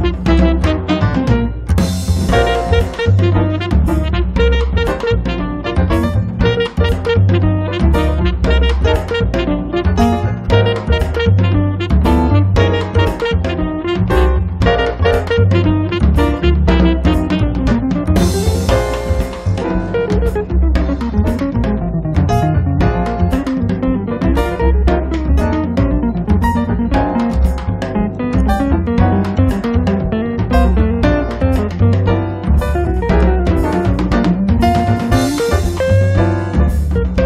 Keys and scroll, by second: 0.0 5, 0.3 Return, 3.4 space, 8.1 space, 9.1 Escape, 12.0 p, 13.4 space, 17.3 m, 21.0 space, 32.6 m, 33.0 Up, 34.9 3, 35.3 0, 35.5 Return, 36.0 space, 36.5 Escape, 37.1 space.